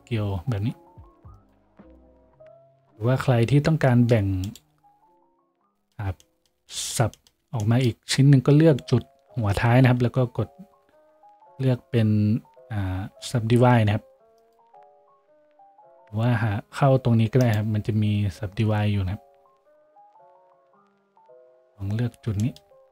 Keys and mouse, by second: 3.3 z, 3.8 z, 10.8 w, 22.3-22.9 shift+drag.